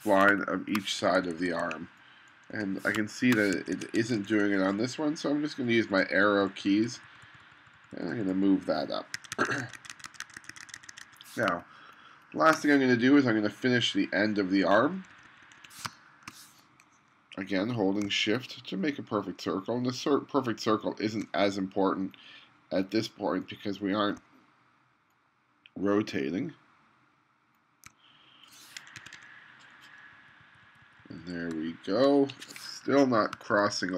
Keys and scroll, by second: 0.3 space, 1.2 2, 2.6 2, 3.0 space, 3.5 2, 9.2 1, 11.5 space, 15.0 2, 15.9 space, 29.0 2, 30.2 Down, 33.4 space.